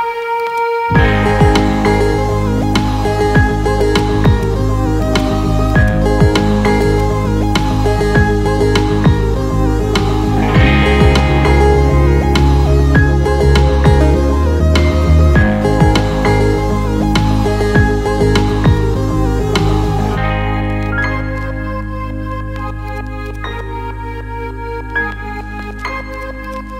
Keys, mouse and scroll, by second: 0.4 click, 2.2 KP_0, 2.7 KP_0, 3.7-5.1 ctrl+alt+middle drag, 5.8-6.2 middle drag, 8.2 shift+d, 10.1 shift+z, 14.9 drag, 15.2-16.0 alt+middle drag, 16.2-16.6 alt+shift+middle drag, 17.0 shift+d, 18.3 click, 18.7-19.3 alt+middle drag, 19.7 KP_0, 21.3 g, 21.6 shift+z, 22.8 drag, 23.2 click, 23.6 KP_0, 24.4 g, 24.8 shift+z, 26.1 drag, 26.3-26.7 alt+middle drag.